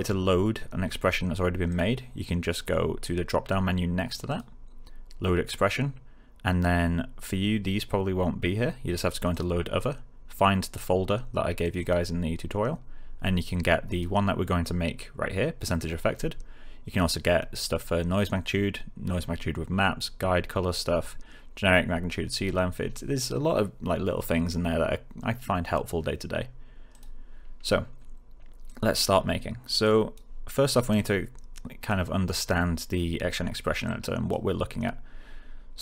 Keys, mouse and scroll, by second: 1.6 click, 4.2 click, 9.2 click, 11.6 click, 13.8 click, 26.8 click.